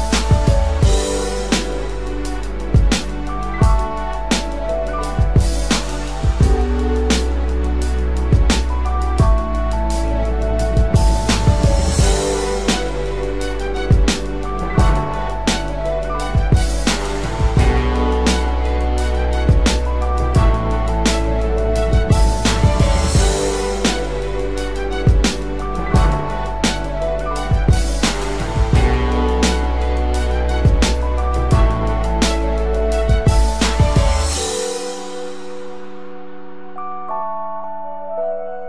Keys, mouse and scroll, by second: 15.2 Return, 16.2 ctrl+t, 20.3 alt+shift+click, 26.1 Return.